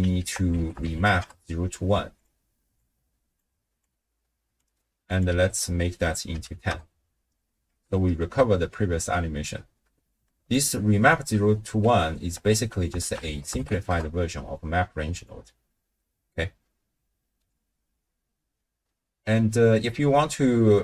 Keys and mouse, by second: 0.2 ctrl+a, 2.7-3.4 drag, 3.8-4.6 drag, 5.1-6.7 drag, 7.7 shift+space, 9.0 space, 10.3 d, 10.5 click, 11.1 d, 11.2 d, 12.5 ctrl+a, 18.8 x.